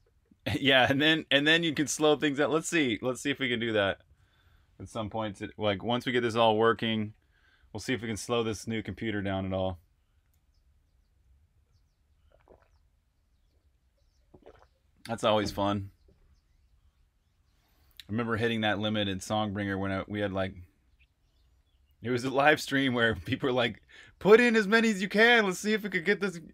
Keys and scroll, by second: 18.7-20.5 typing.